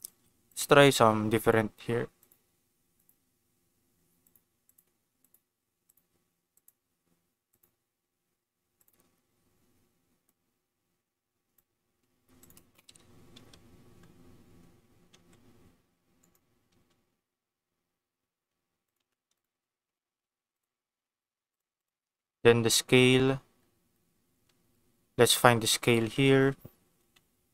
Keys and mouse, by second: 1.4 click, 2.1 click, 4.3 click, 5.1 click, 5.8 click, 7.5-8.9 drag, 10.3-11.5 drag, 12.3 click, 13.3 Tab, 13.7 a, 15.0 r, 15.1 z, 15.2 r, 16.2 click, 16.5 r, 16.7 r, 18.8 click, 18.9 Tab, 19.3 click, 19.8 ctrl+s, 20.5 click, 20.8 g, 21.5 click, 21.8 click, 25.8-27.5 drag.